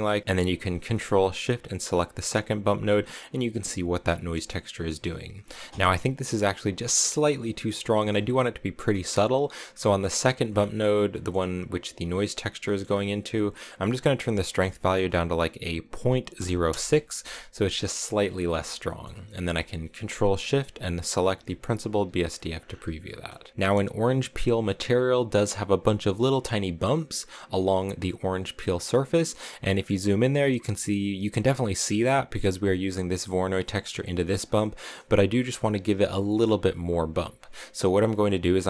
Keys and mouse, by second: 1.8 ctrl+shift+click, 4.2 middle click, 9.5 click, 11.0 click, 13.7-17.2 drag, 18.8 middle click, 21.0 ctrl+shift+click, 21.9 click, 23.4 shift+click, 31.7 middle click, 34.3 click.